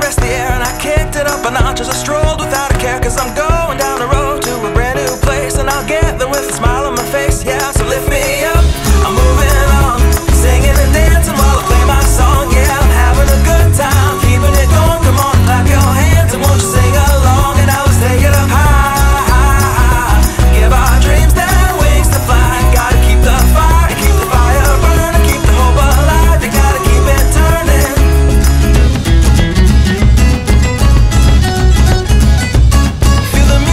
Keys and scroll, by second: 21.5 alt+e, 22.0 e.